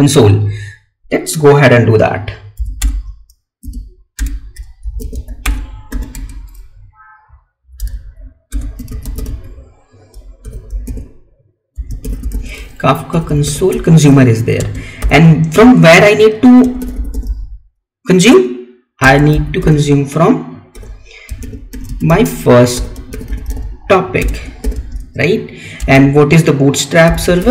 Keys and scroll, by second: 6.2 Tab, 13.8 Tab, 14.5 space, 18.9 space, 26.1 space.